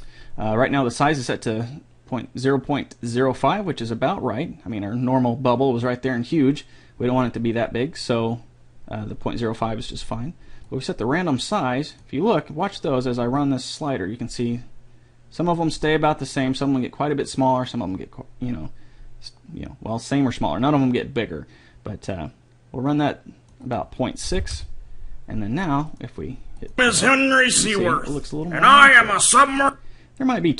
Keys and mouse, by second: 3.2 click, 11.1-12.9 drag, 13.8-15.6 drag, 24.1 click, 24.7 n, 24.8 n, 25.0 n, 29.8-30.5 drag.